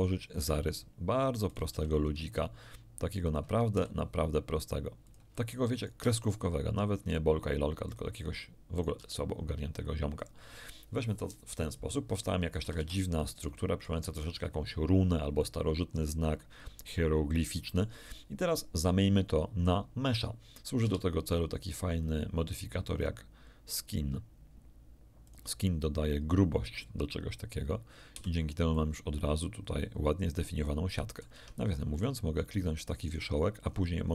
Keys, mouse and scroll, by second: 0.2 ctrl+click, 1.5 right click, 1.7 e, 3.2 ctrl+click, 3.7 ctrl+e, 5.0 ctrl+click, 5.7 ctrl+right click, 5.9 ctrl+e, 7.8 ctrl+click, 8.7 ctrl+click, 8.9 ctrl+e, 10.1 ctrl+click, 12.4 middle click, 12.4 scroll up 2, 12.5 a, 12.7 a, 13.5 shift+middle click, 15.5-16.1 scroll down 2, 16.5-16.9 scroll up 2, 17.1 scroll up 2, 17.4 shift+middle click, 20.8 Tab, 21.9 click, 22.9 click, 25.2 click, 28.1 z, 28.7-31.3 middle drag, 31.3 Tab, 31.7 middle click, 32.9 right click, 33.6-33.9 scroll up 1.